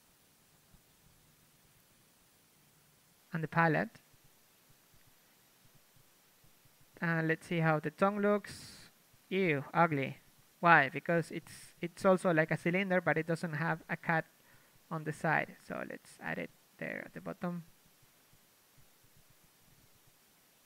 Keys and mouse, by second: 0.0-0.8 typing, 4.0 Tab, 5.6 click, 6.0 a, 6.5 l, 6.7 z, 8.3 z, 8.9 u, 10.6 middle click, 11.0 Tab, 13.0 Tab, 13.2 z, 13.8 ctrl+Tab, 16.9 c, 17.0 c, 18.4 c, 18.5 ctrl+z, 18.8 ctrl+z, 19.3 c.